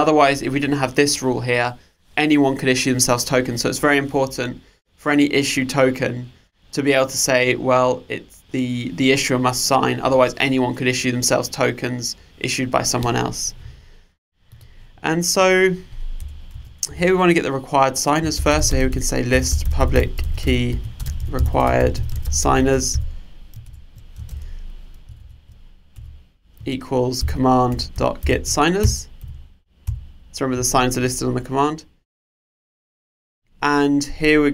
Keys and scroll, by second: 23.7 alt+Return.